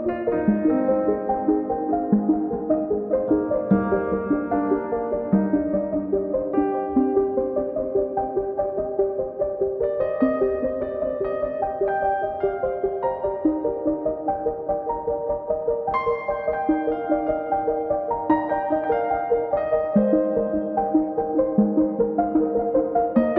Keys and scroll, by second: 0.1 r, 1.4 space, 1.8 p, 3.2 space, 4.0 m, 4.6 Right, 4.8 Left, 5.8 space, 6.6 m, 7.5 1, 7.9 Return, 11.0 Return, 13.9 Escape, 16.9 space, 17.4 e, 20.6 space, 21.4 e.